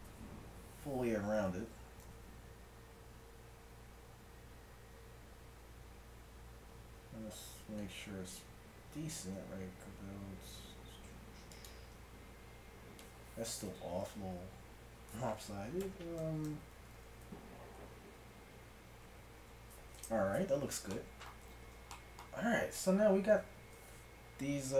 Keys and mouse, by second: 1.5 r, 12.0-14.1 middle drag, 13.7 r, 20.6-21.6 middle drag, 21.6 z, 23.3 z.